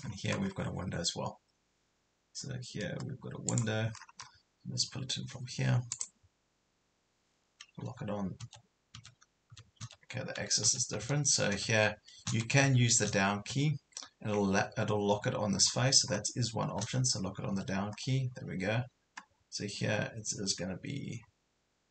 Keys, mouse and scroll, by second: 3.5 click, 4.0 scroll down 1, 5.9 click, 8.4 Left, 9.0-10.7 typing, 15.7 scroll up 1, 16.8-17.5 scroll down 1.